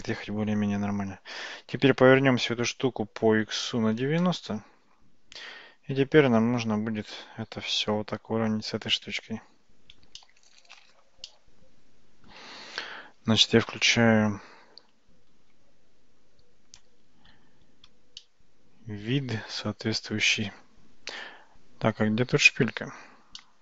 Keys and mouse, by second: 1.8 r, 6.6 g, 10.2-11.0 shift+middle drag, 11.3-12.3 middle drag, 18.2-19.3 shift+middle drag, 23.4-23.6 middle drag.